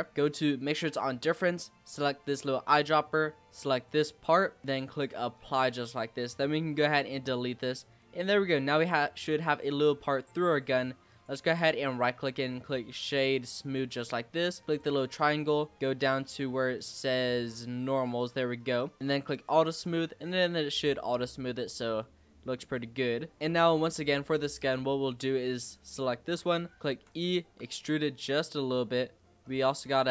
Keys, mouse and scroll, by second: 2.2 click, 4.6-5.4 drag, 5.8 click, 6.6 x, 7.4-9.4 middle drag, 9.4-10.1 scroll up 2, 10.1-10.5 scroll down 3, 10.5-11.0 scroll up 2, 11.0 click, 11.6-13.9 right drag, 13.9-14.6 scroll down 2, 14.6 click, 16.2-18.4 drag, 18.4-19.3 scroll down 1, 19.3 click, 19.8 click, 20.1 scroll down 1, 20.2-21.1 middle drag, 21.1-21.7 scroll up 5, 21.7-22.7 middle drag, 22.7-23.4 scroll down 1, 23.4 click, 23.6 middle click, 24.0 Tab, 25.5 click, 25.9 scroll up 1, 26.0 middle click, 26.8 e, 27.4 s, 29.7 middle click.